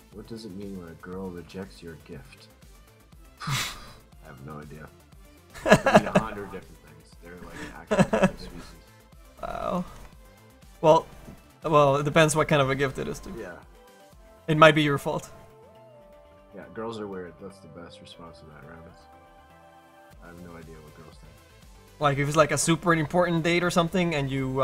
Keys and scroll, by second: 16.3 ctrl+z, 16.6 ctrl+z.